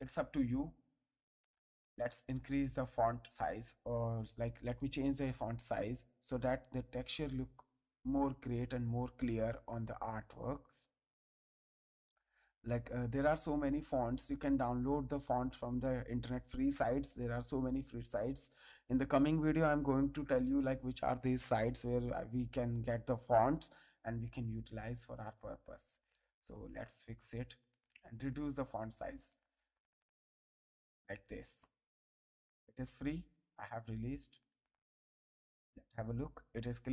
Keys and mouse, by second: 1.8 click, 2.1 ctrl+a, 2.7 click, 3.1 ctrl+a, 5.6 click, 23.3 click, 25.2 click, 26.1 ctrl+click, 27.7 click, 29.4 click, 31.6 Return, 31.6 KP_Enter, 33.3 ctrl+click, 34.7 ctrl+click, 35.4 ctrl+space, 35.6 ctrl+click.